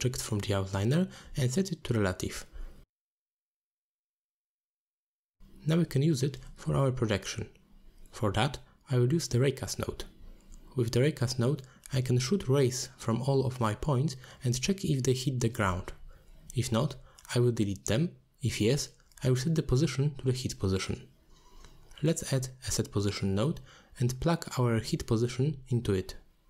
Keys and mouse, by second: 0.0 click, 2.9 click, 3.8 click, 5.6 middle click, 6.0-6.6 drag, 7.2 click, 7.6 alt+shift+click, 10.3 click, 10.9 click, 11.2-13.6 drag, 13.9 middle click, 15.4-16.3 drag, 17.2-18.4 drag, 18.6 middle click, 19.4-21.6 drag, 21.7 middle click, 23.4-25.1 drag, 25.6 middle click.